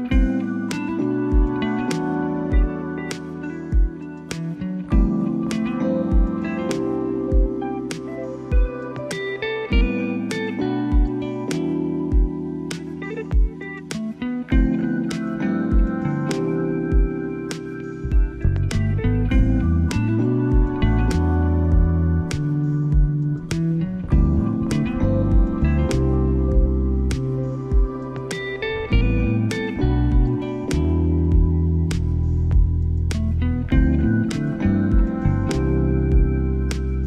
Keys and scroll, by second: 1.0 ctrl+alt+z, 12.1 ctrl+u.